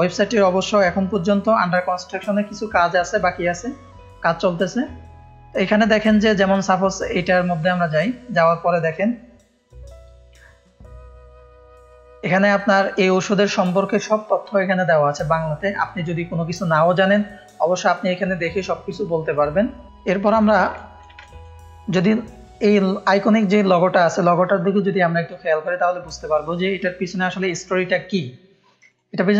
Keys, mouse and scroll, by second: 3.6-4.8 scroll down 1, 5.0 scroll up 1, 6.5-6.9 scroll up 1, 7.2 click, 8.3-8.7 scroll down 2, 11.0-11.3 scroll down 2, 11.9-12.3 scroll up 2, 15.1 scroll up 1, 20.7 ctrl+space, 20.7 ctrl+click, 21.2 click, 21.2 space, 21.9 click, 25.4 click, 26.7-29.3 drag.